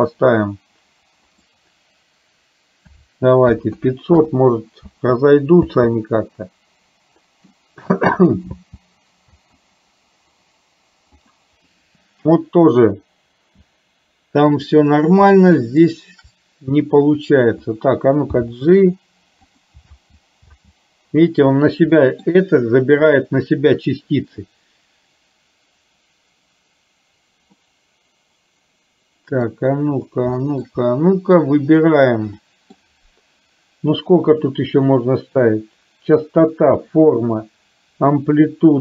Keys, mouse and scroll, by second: 1.2-4.3 drag, 3.7 KP_0, 4.9 space, 5.7 space, 6.1-7.6 middle drag, 8.7 space, 9.5 space, 14.7 click, 18.6 g, 19.9 space, 20.6 space, 22.1 shift+middle click, 27.8 middle click, 28.4-29.6 middle drag, 30.6 shift+middle click, 31.5 click, 32.4 middle click, 32.8 click.